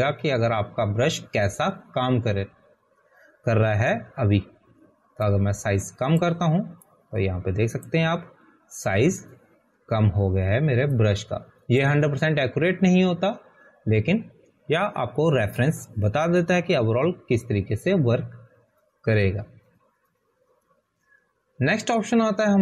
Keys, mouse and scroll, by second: 7.8 click, 13.8 click.